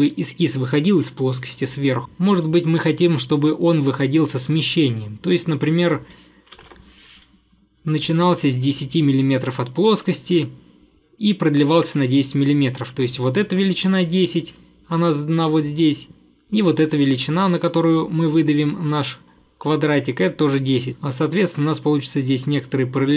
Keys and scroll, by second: 6.3-7.2 typing.